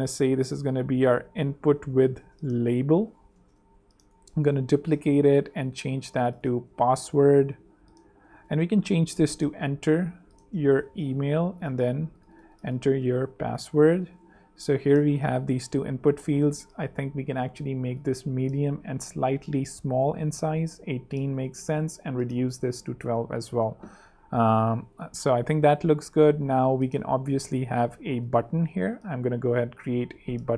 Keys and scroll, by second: 0.9-4.3 typing, 2.7 alt+shift+l, 5.0 super+space, 5.5 super+space, 6.9 shift+super+[, 7.1-11.8 typing, 9.3 shift+super+e, 13.0-14.4 typing, 14.7 super+Return, 14.8 super+3, 15.9 super+2, 19.6 shift+super+,, 22.1-22.9 typing, 22.9 super+3, 25.9 super+2, 28.5 a.